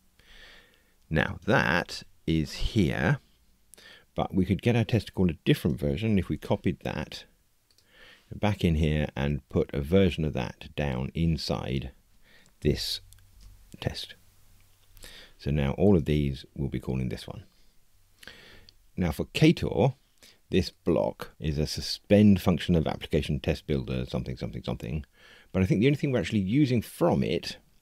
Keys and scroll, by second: 1.4 super+b, 6.2 super+c, 13.3 super+v, 15.9 super+b.